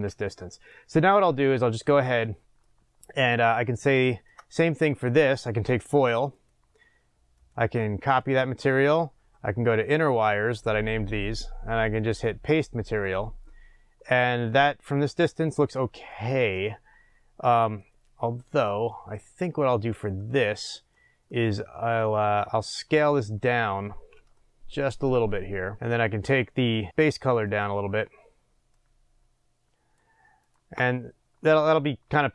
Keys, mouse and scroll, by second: 3.3-3.9 scroll up 1, 6.3 click, 9.9 click, 13.0-23.7 drag, 23.7-26.9 middle drag, 23.7-24.4 scroll up 2, 26.9 click, 31.1-32.3 scroll down 1.